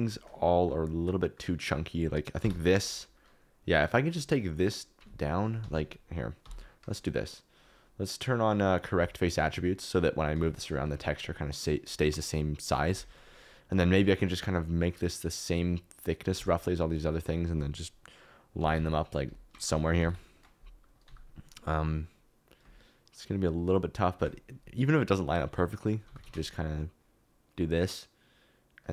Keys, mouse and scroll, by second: 0.0 KP_Decimal, 0.1 middle click, 1.0 middle click, 2.4 l, 3.0 middle click, 3.9 middle click, 5.0 s, 5.6 Escape, 6.4 KP_7, 7.5-8.8 drag, 10.3 s, 12.8 Escape, 13.9 s, 16.1 click, 16.3 g, 17.3 click, 18.5-21.0 typing, 19.3 Escape, 20.3 click, 24.1-25.5 middle drag, 25.2 KP_Decimal, 25.6 middle click, 26.0 g, 26.2 z.